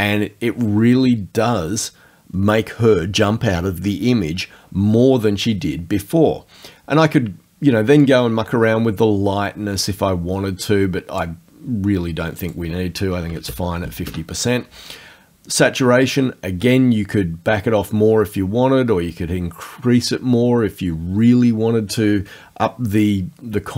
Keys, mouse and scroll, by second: 8.0-11.4 drag, 12.4 right click, 13.2 KP_5, 13.4 KP_0, 14.1 KP_Enter, 16.0-23.7 drag.